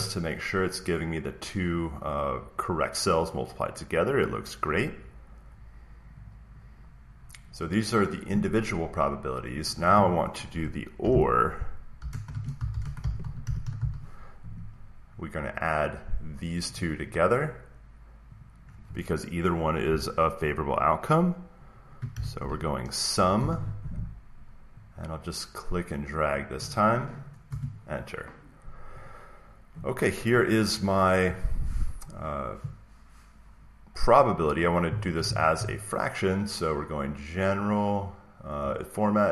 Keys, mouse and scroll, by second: 6.2 click, 8.2 click, 9.6 click, 10.7-13.2 typing, 12.5 click, 15.9-20.4 drag, 21.3-23.1 typing, 26.2 click, 27.4 Return, 29.0 click, 29.6-31.0 drag, 37.6-39.3 drag.